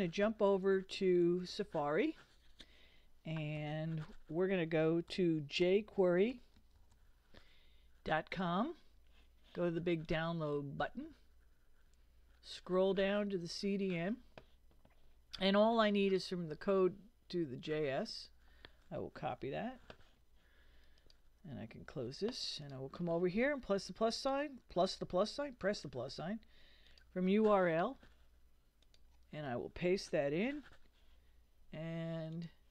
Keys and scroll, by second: 3.6 super+n, 5.1 super+l, 5.6 super+j, 5.7-7.4 typing, 8.1 Return, 19.5 super+c, 21.9 super+w, 30.3 super+v.